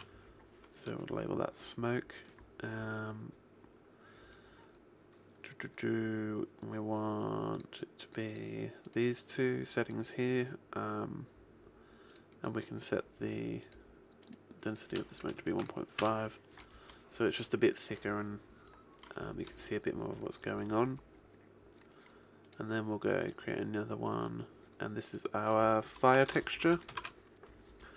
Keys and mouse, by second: 1.4-5.0 middle drag, 7.6-10.7 drag, 10.7 middle click, 12.2-16.0 drag, 22.5-25.0 drag, 25.2 click.